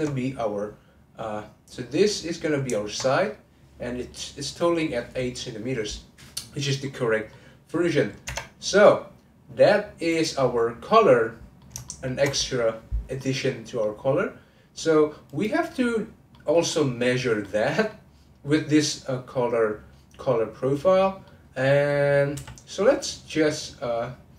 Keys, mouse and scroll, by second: 2.0 click, 6.8-8.2 middle drag, 8.2 Tab, 10.1 click, 10.9-14.0 middle drag, 14.0-15.3 scroll up 2, 15.3 click, 16.3 middle click, 16.7-17.4 scroll down 1, 17.4-20.5 middle drag, 20.6-21.0 scroll up 1, 21.0-22.3 middle drag, 22.3 n.